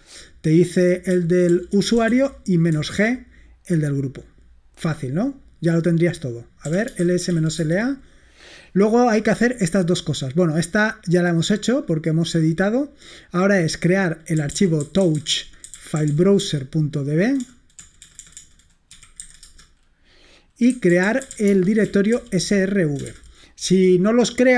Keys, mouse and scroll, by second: 1.6 ctrl+p, 2.0 BackSpace, 2.1 g, 2.7 Return, 6.5-7.8 typing, 10.9-12.0 drag, 14.2-19.2 typing, 19.4 Return, 20.7-23.1 typing.